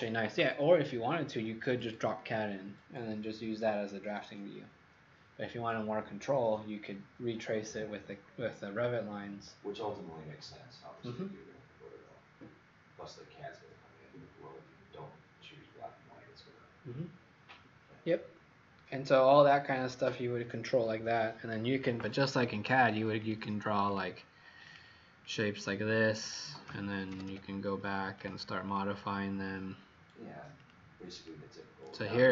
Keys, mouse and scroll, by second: 23.9 click, 24.6 click, 25.1 click, 26.2 click, 26.8-27.7 typing, 28.3 click, 28.6 click, 30.5 click, 31.3 click.